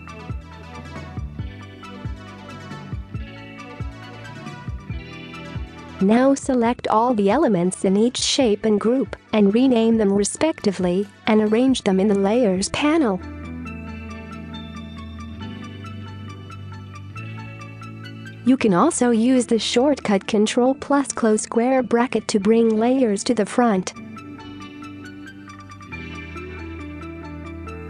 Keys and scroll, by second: 0.0-0.9 typing, 4.3 space, 6.9 ctrl+g, 10.1-11.3 typing, 14.0 ctrl+g, 15.0-16.5 typing, 15.5 Return, 17.1 ctrl+g, 17.7-18.1 typing, 18.3 Return, 19.3 space, 19.9 ctrl+g, 20.4 typing, 20.8 Return, 21.6 ctrl+a, 21.9 ctrl+z, 22.5 ctrl+[, 22.8 space, 23.4 ctrl+g, 23.9 typing, 26.0-26.8 typing, 27.4 ctrl+g.